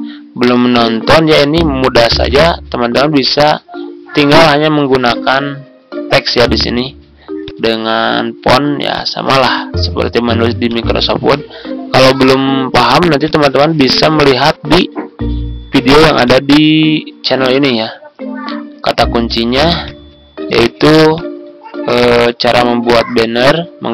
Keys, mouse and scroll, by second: 1.4 ctrl+scroll up 1, 2.3-17.3 drag, 18.8 right click, 19.8 click, 22.9 ctrl+scroll down 1.